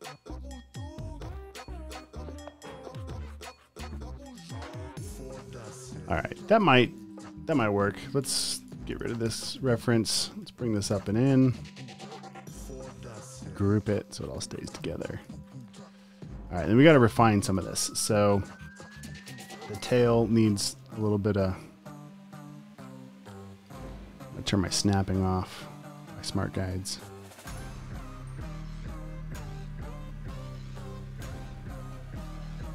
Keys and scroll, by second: 5.3 v, 5.6 space, 7.3 v, 8.5 space, 9.0 alt+super+space, 9.3 v, 10.8 space, 11.2 v, 12.6 super+g, 14.3 space, 14.7 space, 15.6 space, 18.3 super+space, 18.8 a.